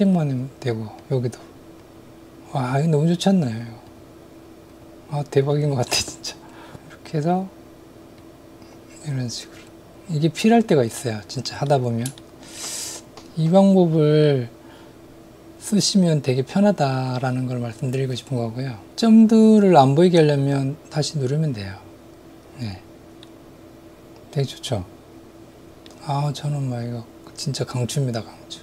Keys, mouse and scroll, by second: 1.0 click, 1.8 click, 2.6 click, 3.9 click, 4.7 click, 5.6 click, 8.2-11.4 drag, 11.7 middle click, 12.2 shift+middle click, 20.7 click, 23.2-25.9 middle drag.